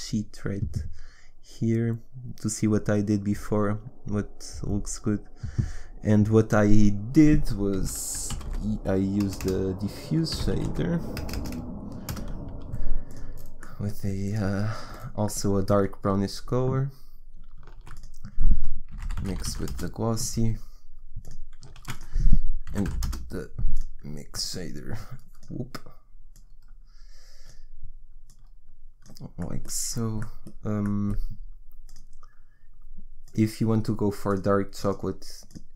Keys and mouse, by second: 9.4 BackSpace, 11.3 BackSpace, 14.6-17.7 drag, 17.7 shift+a, 19.5 s, 21.8 shift+a, 28.9-31.8 drag, 31.8-35.7 middle drag.